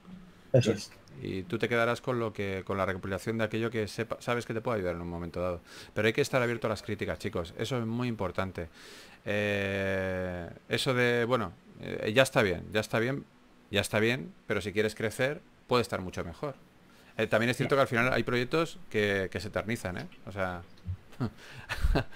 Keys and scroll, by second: 0.0-0.4 typing, 2.9 2, 6.9-8.4 typing, 10.5 s, 12.9 4, 15.0 typing.